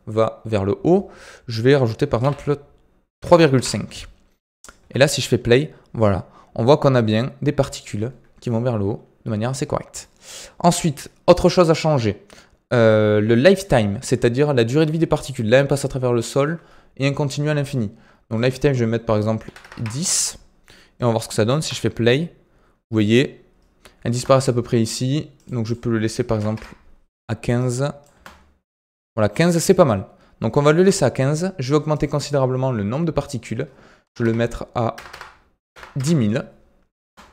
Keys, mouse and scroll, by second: 4.7 space, 7.4 space, 8.0-8.3 scroll down 3, 8.3-10.9 middle drag, 10.9-13.9 scroll up 3, 14.3-18.3 shift+middle drag, 18.3-21.5 drag, 21.5 space, 24.0 space, 24.8 click, 25.6-28.0 drag, 28.0 space, 30.7 space, 31.9-35.0 drag, 35.0 KP_0, 37.0 space.